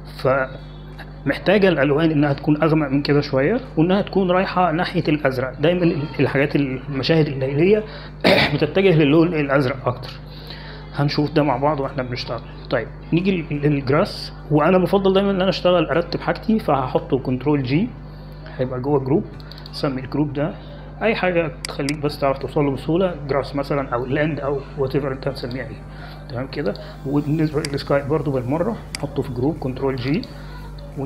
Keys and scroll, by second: 19.6 ctrl+g, 23.0 g, 23.2 r, 24.2 a, 25.2 s, 26.0 Return, 30.4 ctrl+g.